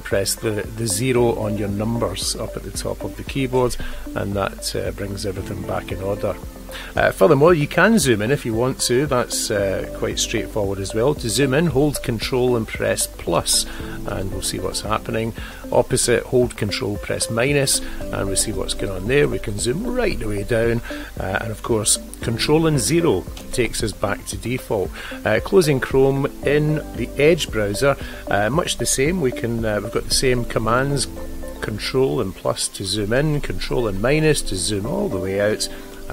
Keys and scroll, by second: 12.0 ctrl+=, 17.8 ctrl+-, 23.1 ctrl+0.